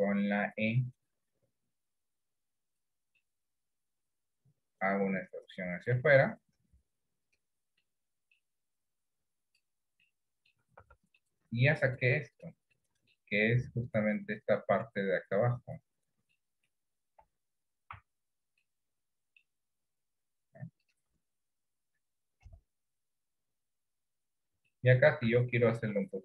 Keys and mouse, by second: 3.3-6.0 middle drag, 7.9 middle click, 9.1 click, 10.1 middle click, 10.9 Tab, 11.3 middle click, 12.7 middle click, 16.5 middle click, 17.3 KP_1, 18.0 Tab, 18.7 middle click, 22.5 KP_1, 23.4 KP_3, 24.8 shift+middle click.